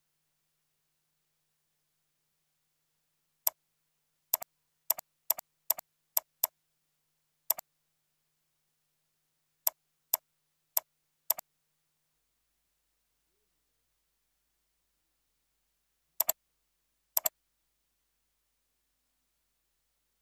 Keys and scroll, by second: 0.5 ctrl+Down, 0.8 ctrl+Right, 1.1 ctrl+Down, 8.5 ctrl+Down.